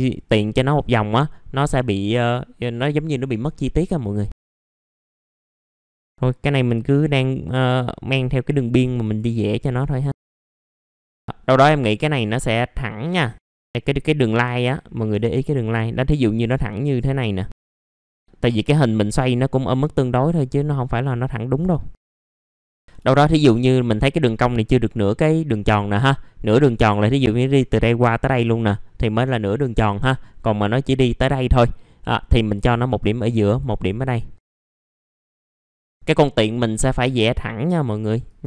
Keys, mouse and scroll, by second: 1.2 middle click, 1.5-1.8 scroll down 1, 2.8 scroll up 1, 4.3 click, 5.1 middle click, 5.1 scroll down 1, 5.3-5.6 scroll up 1, 5.6 click, 5.8 scroll down 1, 6.0 scroll up 1, 6.8 click, 7.2 middle click, 7.7-8.4 scroll up 1, 9.0 click, 9.5 click, 9.6 middle click, 9.6-10.1 scroll down 1, 10.2 scroll up 1, 10.7 scroll down 1, 10.9 middle click, 11.0 BackSpace, 11.2-13.3 middle drag, 14.6-15.1 scroll up 1, 17.5 shift+click, 17.8 click, 17.9 middle click, 18.1-18.8 scroll up 1, 19.0 click, 20.1 middle click, 21.5 click, 22.4 middle click, 22.8 BackSpace, 32.5 click, 33.9 middle click, 34.5 click, 35.1 scroll down 1, 35.2 middle click, 35.7 shift+click, 38.2 shift+click.